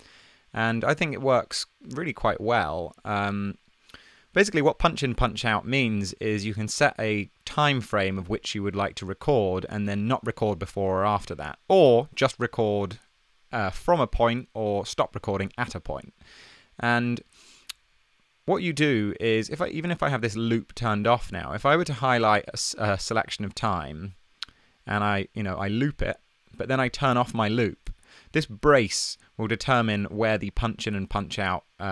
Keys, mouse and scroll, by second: 26.0 super+l.